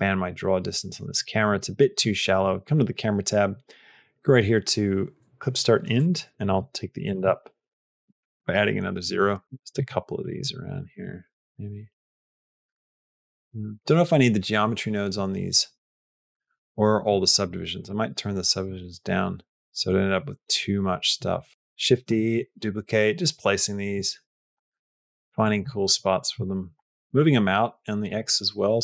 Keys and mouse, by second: 1.0 click, 1.4 click, 2.2 click, 5.8-7.6 drag, 9.0-10.8 typing, 21.2 r, 21.5 shift+d, 21.9 g, 24.5 g, 25.6 g, 26.8 g, 28.2 g.